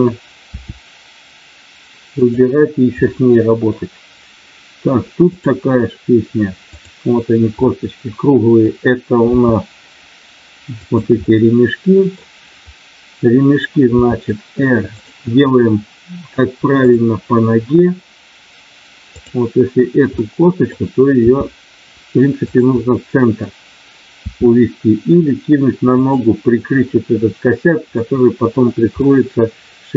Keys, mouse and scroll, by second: 0.5 r, 2.1 click, 3.0 middle click, 5.3 click, 7.6 middle click, 9.4 r, 10.7 click, 11.1-12.2 middle drag, 13.9 r, 14.9 click, 16.9 click, 20.1 middle click, 21.2 r, 22.7 middle click, 24.1 r, 26.0 click, 28.0 middle click, 28.9-29.9 middle drag.